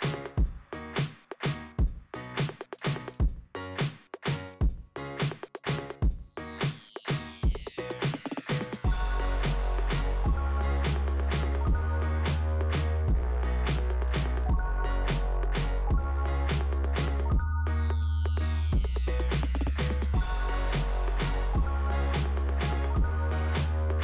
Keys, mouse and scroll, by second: 2.2 click, 2.7 click, 3.1 click, 3.8 click, 6.9 click, 6.9 click, 7.3 click, 7.3 double click, 8.8 click, 9.1 click, 9.1 double click, 9.3 double click, 10.2 click, 10.5 click, 12.3 middle click, 13.9 click, 15.0 click, 15.1 click, 16.2 click, 17.5 click, 20.4 scroll down 1, 21.8 click, 22.3 click.